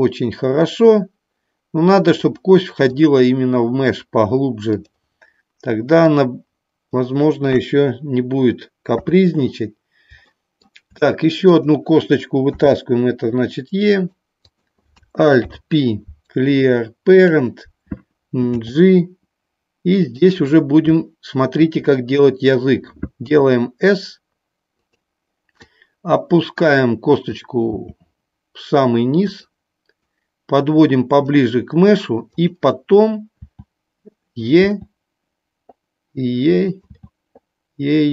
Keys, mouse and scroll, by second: 2.8-3.9 drag, 4.8 click, 6.0 click, 7.4 KP_1, 9.0 KP_3, 10.4 shift+middle click, 14.5 click, 15.4 alt+p, 20.1 click, 24.8 click, 25.7-27.3 drag, 29.2 click, 29.8-31.3 drag, 32.3 click, 34.5 click, 34.6 e, 36.6 click, 36.8 e.